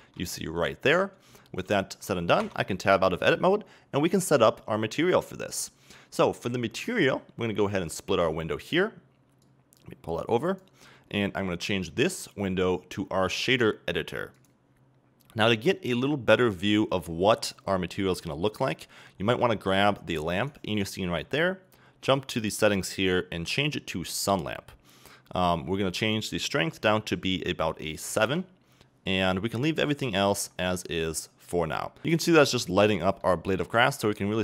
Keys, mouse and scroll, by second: 0.0 ctrl+middle click, 0.3-1.1 scroll up 2, 1.1 scroll down 2, 1.4-2.4 ctrl+middle drag, 2.4 Tab, 9.5-10.9 drag, 10.9-12.5 scroll up 2, 12.5-17.6 drag, 17.6-19.4 middle drag, 18.6 scroll down 1, 20.4 right click, 24.3 click, 28.2-31.7 drag, 28.4 KP_Enter, 29.8-31.3 scroll up 2, 31.3 scroll up 1, 31.7-34.4 middle drag.